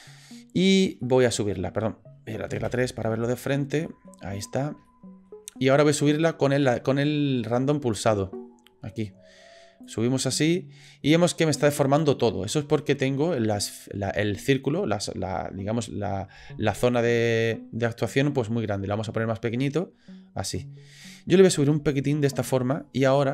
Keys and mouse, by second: 1.0 middle click, 2.6 KP_3, 3.8 shift+middle click, 4.9 shift+middle click, 7.4 middle click, 9.9-22.5 drag, 22.7 shift+middle click.